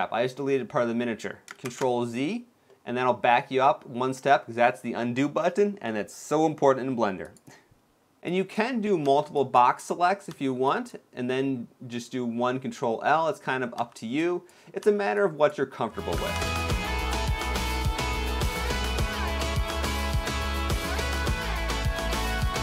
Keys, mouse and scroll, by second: 0.1 middle click, 1.8 middle click, 1.8 ctrl+z, 2.4 middle click, 6.9 click, 7.9 b, 8.7 b, 10.0 b, 11.0 middle click, 12.4 middle click, 13.4 middle click, 13.5 b, 14.5 b, 16.2 ctrl+l, 16.7 middle click, 17.3 x, 17.6 middle click, 18.1 scroll up 2, 18.3-20.5 typing, 20.1 shift+middle click, 21.3 ctrl+l, 21.7 middle click, 21.9 x, 22.3 shift+middle click, 22.5-22.6 scroll up 3.